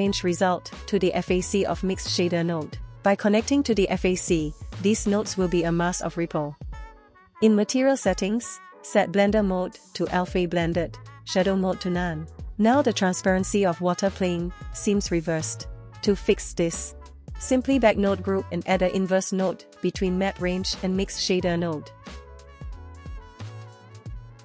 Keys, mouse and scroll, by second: 1.2 click, 2.8 click, 6.5-9.1 drag, 11.1-12.7 drag, 13.5 click, 14.4 shift+a, 20.6 click, 21.0 space, 21.9 space, 22.3 middle click, 23.2 click, 23.6 middle click.